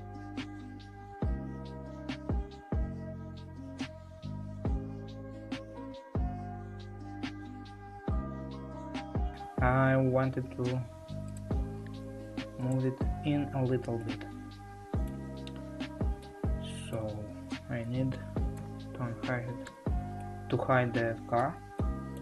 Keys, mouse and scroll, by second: 0.4-6.6 middle drag, 6.6 Tab, 7.5-8.7 middle drag, 8.7 Tab, 9.3-9.6 scroll up 2, 11.4 click, 12.8 shift+click, 14.1-17.8 middle drag, 17.8 a, 18.6 l, 19.7 h, 20.1-22.2 middle drag.